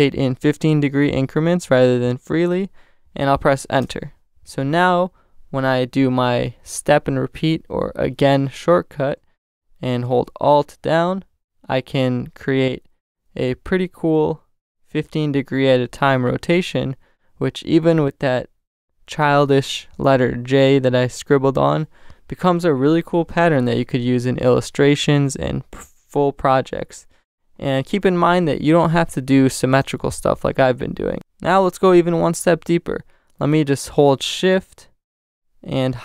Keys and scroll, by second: 3.8 Return, 11.4 alt+shift+super+t, 12.7 alt+shift+super+t, 29.5 shift+super+n, 30.2 shift+super+Return, 30.9 Return.